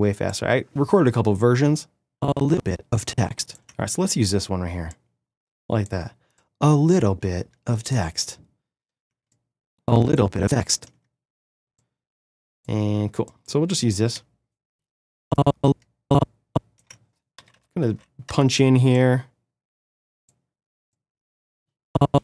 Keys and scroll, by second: 17.3 =, 18.9 -.